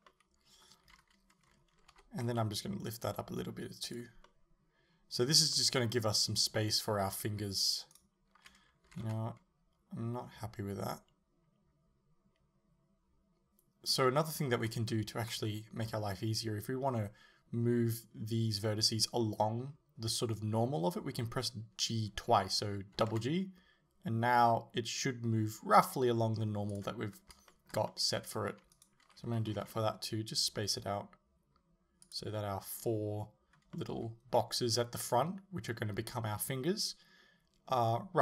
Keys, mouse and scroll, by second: 0.1-4.0 middle drag, 0.9 z, 2.0 g, 4.0 click, 4.3-8.0 middle drag, 8.0 alt+right click, 8.9 g, 14.0 right click, 14.4-14.9 scroll up 1, 14.9-28.8 shift+middle drag, 23.0 g, 28.8 alt+right click, 29.5 g, 32.2 click, 33.8-38.2 middle drag.